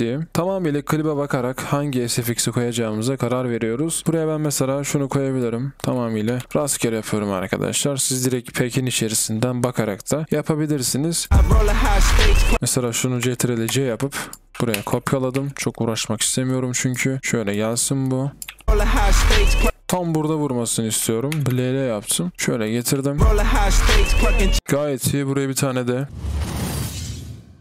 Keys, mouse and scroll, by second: 22.9 typing, 24.6 typing, 26.0 space, 27.5 space.